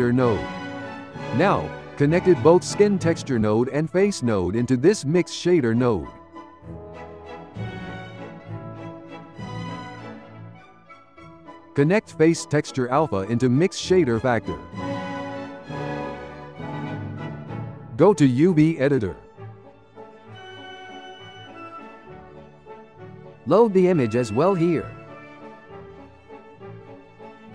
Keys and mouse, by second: 3.6 click, 5.7-7.3 shift+middle drag, 7.3 click, 8.5 ctrl+j, 9.3 g, 10.4-12.4 ctrl+middle drag, 12.4 click, 16.0 click, 16.6 Tab, 18.2-21.0 drag, 21.0-22.8 shift+middle drag, 22.8-23.5 drag, 26.3-27.5 ctrl+middle drag.